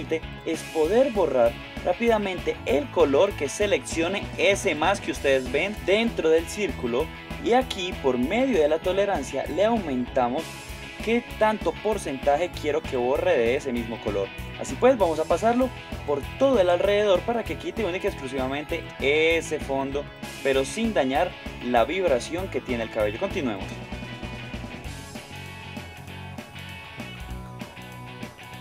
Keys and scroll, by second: 25.9 ctrl+alt+space, 26.1 super+Tab, 27.7 alt+super+space.